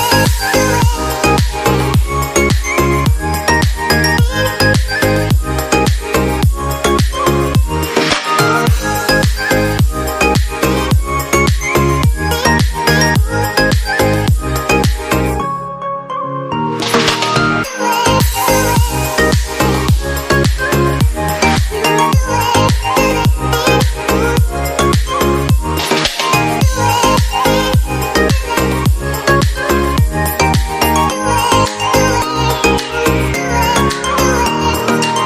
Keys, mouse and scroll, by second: 0.5 Delete, 5.6 Right.